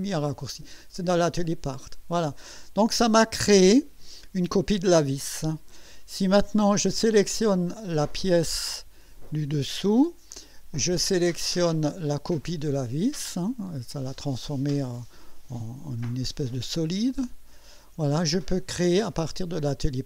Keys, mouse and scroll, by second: 1.4 click, 8.4 click, 17.3 ctrl+click.